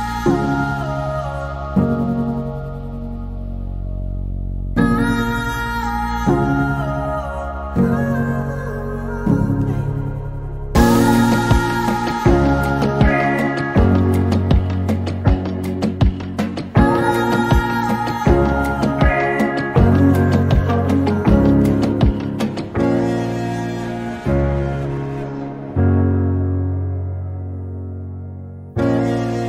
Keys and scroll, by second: 4.0 p, 7.8-8.8 typing, 11.3 p, 13.1 p, 14.5-17.4 typing, 20.0-23.1 typing, 25.5 r, 29.1-29.4 typing.